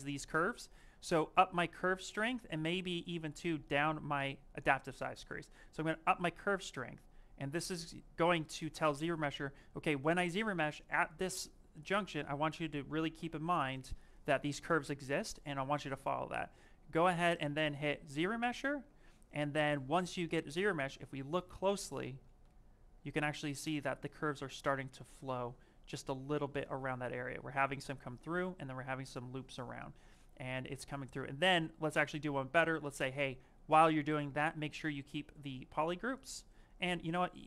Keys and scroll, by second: 21.8 ctrl+z, 31.0 ctrl+z.